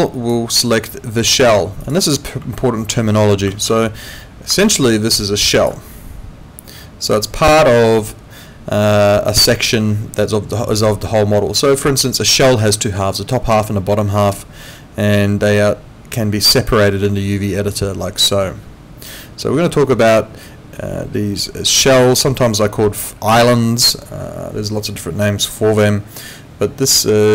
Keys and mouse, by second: 1.8 click, 2.5 middle click, 3.7 ctrl+2.